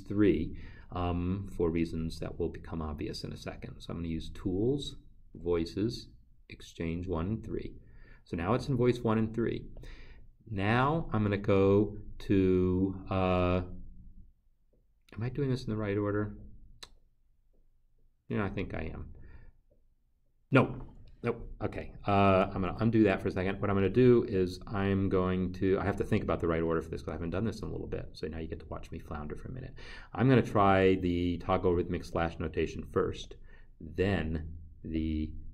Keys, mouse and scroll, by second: 11.3 click, 22.7 ctrl+z, 25.7 click, 26.8 click, 32.8 click, 35.4 click.